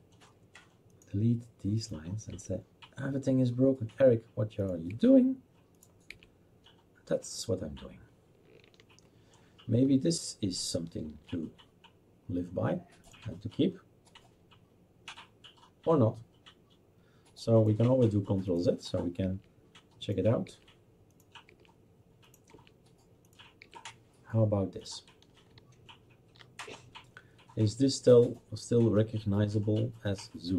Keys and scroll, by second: 2.4 Delete, 4.9 Delete, 6.1 Delete, 19.2 Delete, 20.5 Delete, 21.5 Delete, 22.7 Delete, 23.7 Delete.